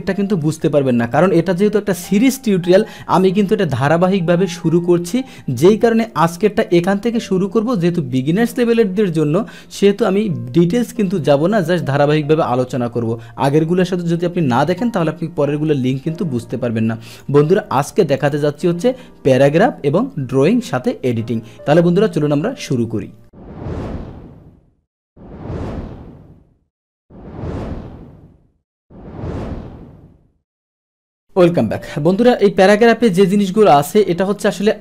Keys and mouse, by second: 17.1 click, 18.2 click.